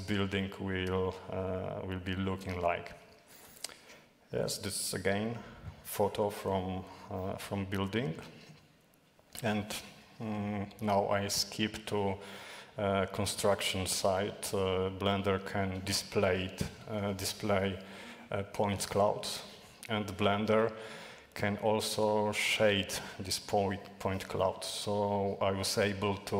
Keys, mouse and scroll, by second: 0.0-1.0 typing, 2.2 s, 7.5 ctrl+shift+\, 22.4 click, 23.5-26.3 typing.